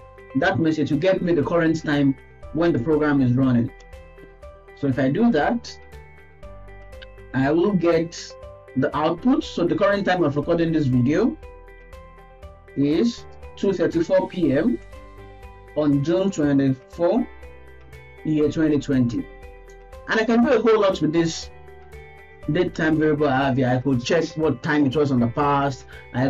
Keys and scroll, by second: 0.9 ctrl+s.